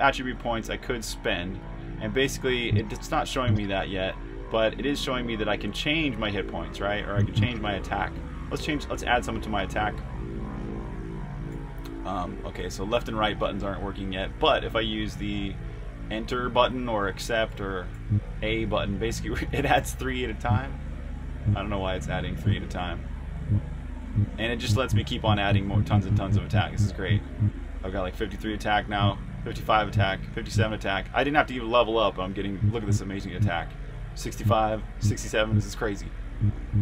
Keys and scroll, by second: 0.7 super+Tab, 2.4-3.3 typing, 11.3-13.9 typing, 23.0-25.2 typing, 28.5-29.2 typing, 33.3-35.3 typing, 36.4 typing.